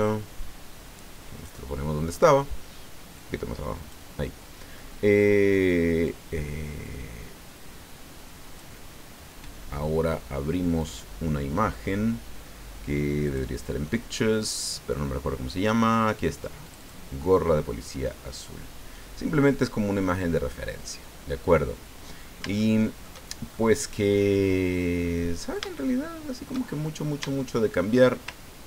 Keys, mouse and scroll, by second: 0.0-1.6 drag, 3.1 click, 6.0-8.7 drag, 10.8 click, 13.2 click, 16.6 click, 17.9-18.6 scroll down 2, 20.1-23.2 drag, 23.5-26.7 shift+drag, 26.8 shift+click, 27.8 shift+middle click.